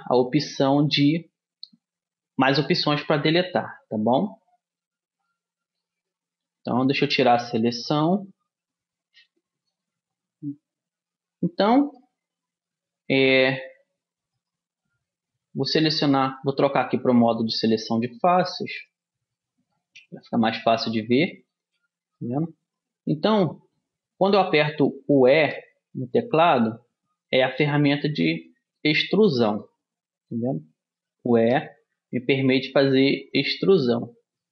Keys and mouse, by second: 6.7 a, 7.4 click, 7.5-9.6 middle drag, 14.5-16.4 right drag, 17.5-19.4 drag, 18.8-19.8 right drag, 19.8 middle click, 21.0 middle click, 23.0 middle click, 24.3 middle click, 25.5 e, 29.4-31.1 middle drag, 31.1-32.9 drag, 31.5 e, 34.0-34.5 middle drag.